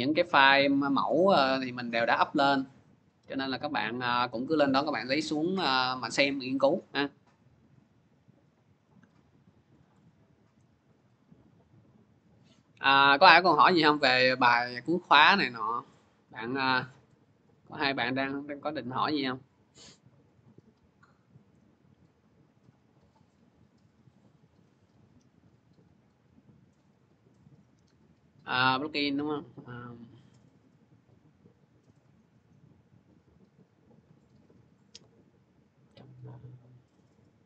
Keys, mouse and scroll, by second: 2.6 click, 3.8 scroll down 2, 5.0 scroll down 2, 5.1-6.3 scroll, 6.9-7.5 scroll, 10.0 click, 11.5 click, 12.7-16.6 drag, 21.1 click, 22.4 click, 23.0 click, 24.1 click, 28.2 click, 29.2 click, 30.9 click, 34.6-36.0 drag, 37.0 click.